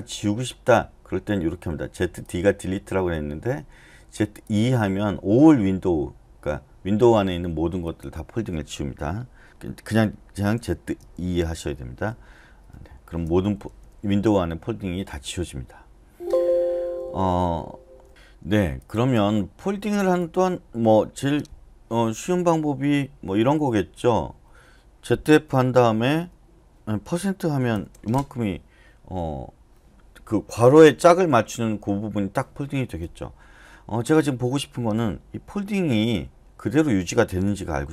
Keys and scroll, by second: 9.2-17.1 typing, 13.9 Escape, 25.3-26.2 typing, 27.7 shift+5.